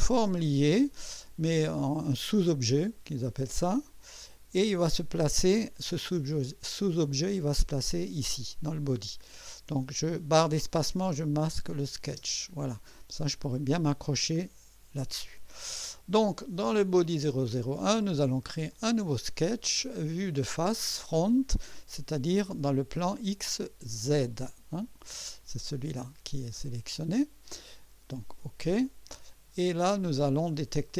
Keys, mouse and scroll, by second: 4.3 click, 12.0 click, 12.0 space, 18.7 click, 24.3 click, 28.2 click, 29.1 scroll up 2, 29.7-30.3 right drag.